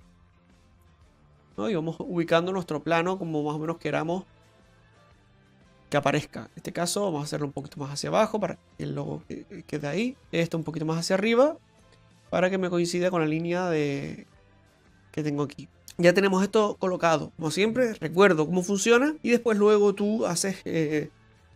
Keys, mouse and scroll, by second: 0.7 Tab, 1.4 right click, 2.3 click, 7.1 right click, 8.2 click, 10.2 right click, 10.7 right click, 11.5-12.0 scroll up 5, 12.1 shift+middle click, 12.6 scroll up 2, 14.3 click, 15.6 right click, 15.6 shift+middle click, 15.6-16.2 scroll down 1.